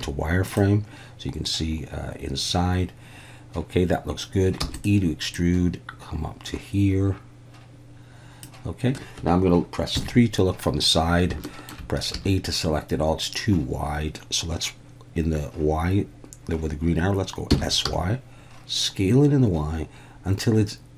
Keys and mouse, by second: 4.6 e, 4.7 click, 5.4-8.4 drag, 10.0 KP_3, 11.6 shift+click, 12.1 a, 17.5 s, 17.8 y.